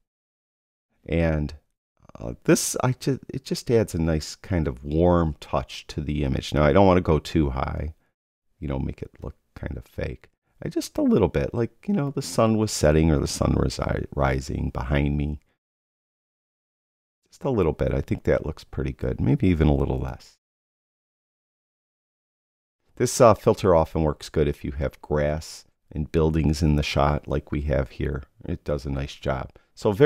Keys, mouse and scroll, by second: 2.5 click, 4.1 click, 13.8 click, 17.6 click, 19.0 click, 20.7 click.